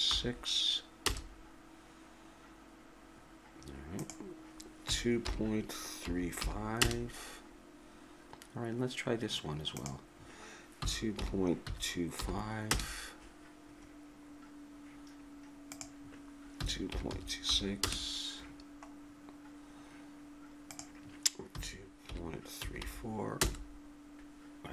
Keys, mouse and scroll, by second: 4.0-6.8 drag, 9.8-12.7 drag, 15.7-17.8 drag, 19.3-20.7 middle drag, 20.7-22.5 drag.